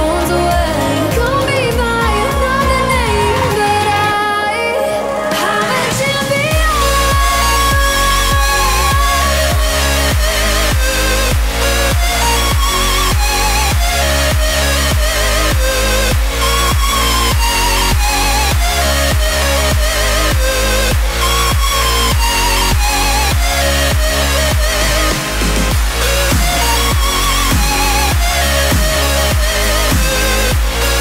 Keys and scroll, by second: 0.0-3.7 typing, 19.8 w, 21.8 ., 22.9-29.3 typing.